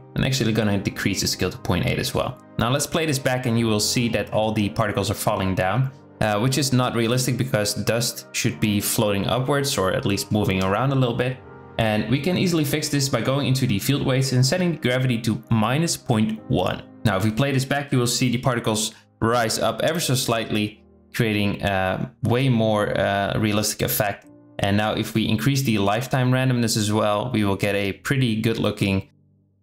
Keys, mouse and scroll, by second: 1.4 space, 3.8 space, 13.0-15.7 drag, 16.1 space, 22.7-24.0 drag, 26.7 space, 26.9 z, 29.2 click.